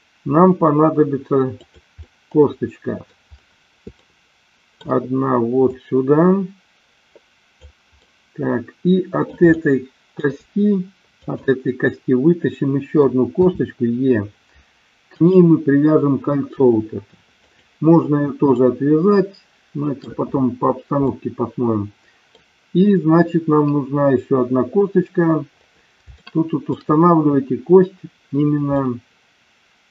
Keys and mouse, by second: 1.5 click, 2.0-3.2 middle drag, 4.0 shift+middle click, 5.6-7.6 drag, 8.0-9.5 middle drag, 9.6 shift+middle click, 11.1 click, 13.4 e, 17.5 click, 18.5-20.1 shift+middle drag, 21.0-22.4 middle drag, 26.2 shift+middle click, 28.7-29.9 middle drag.